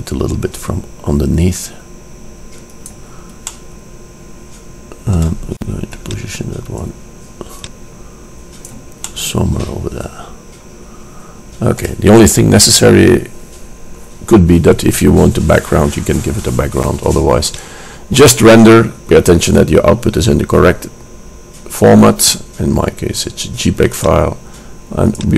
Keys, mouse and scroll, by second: 0.1 shift+d, 3.5-5.4 drag, 6.1-6.9 drag, 9.3-11.0 middle drag, 17.6-19.5 drag, 22.3-24.0 drag, 25.3 click.